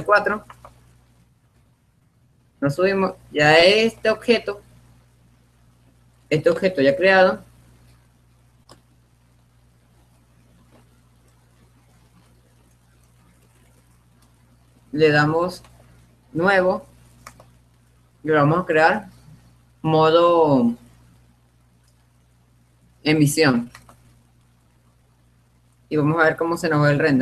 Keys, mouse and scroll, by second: 1.1 click, 2.6-3.8 drag, 3.8-4.9 right drag, 4.9-8.1 middle drag, 8.4 middle click, 9.2-10.8 middle drag, 12.1-15.8 middle drag, 16.3-19.2 drag.